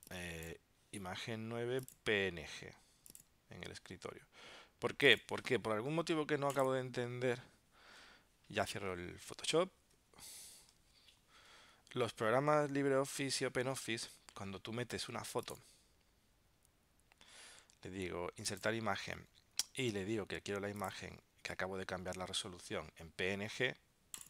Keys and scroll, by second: 9.3 super+w, 9.8 super+q, 11.0 super+Tab, 12.5 super+Tab.